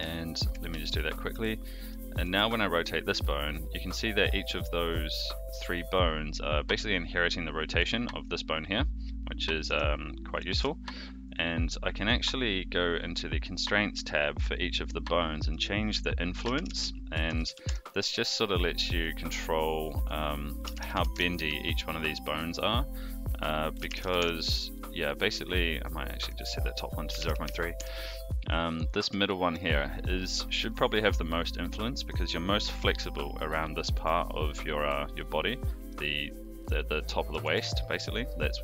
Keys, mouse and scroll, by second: 0.4 shift+click, 1.3 ctrl+shift+c, 1.8 click, 2.2 r, 7.7 r, 10.5 alt+r, 11.3 click, 15.4-18.1 drag, 19.0 click, 20.0-21.5 drag, 22.4 click, 23.1-24.6 drag, 25.4 click, 26.2-28.1 drag, 28.7 click, 29.2 shift+middle drag, 30.6 shift+middle drag, 33.8 click, 33.9 r, 37.4 alt+r.